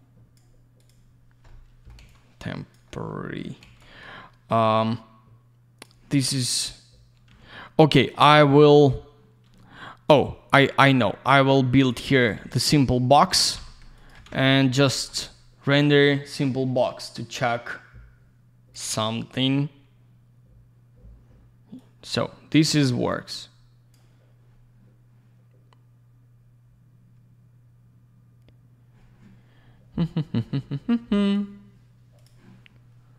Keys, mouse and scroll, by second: 0.8 click, 0.9 click, 1.2 scroll down 1, 2.0 alt+я, 2.1 click, 2.9 middle click, 3.8 click, 7.3 й, 10.1 click, 10.2 click, 10.8 click, 10.9 click, 11.3 click, 12.1 click, 12.3 click, 13.3 alt+shift+й, 14.0 ctrl+click, 14.2 alt+й, 14.8 middle click, 15.2 alt+middle click, 17.4 click, 21.8 click, 23.1 click, 31.2 right click, 32.2 click.